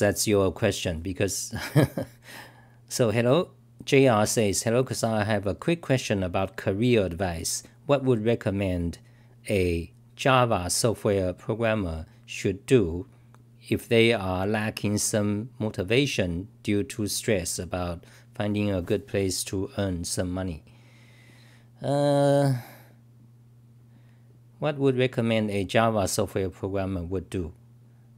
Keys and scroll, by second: 23.1 typing.